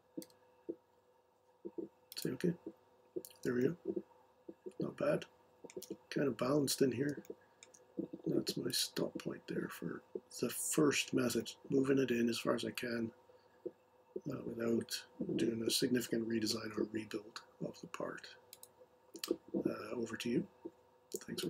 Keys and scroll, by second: 0.0-0.2 typing.